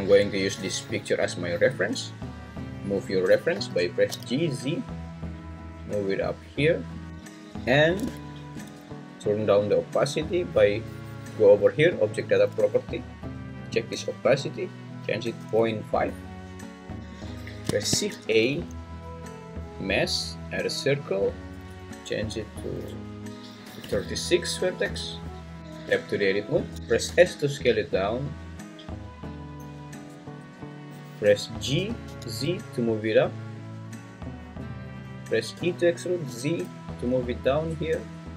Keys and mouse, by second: 3.5 g, 4.1 z, 7.0 click, 14.6-16.1 drag, 17.8 shift+a, 21.6-25.3 drag, 25.7 Tab, 26.7 s, 26.7 Escape, 27.0 s, 30.2 `, 31.8 g, 32.0 z, 34.7 click, 35.5 e, 36.3 z.